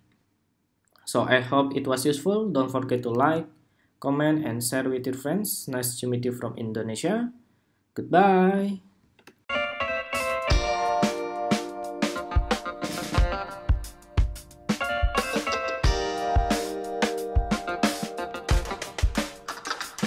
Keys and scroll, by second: 2.9 super+r, 9.1 shift+super+2.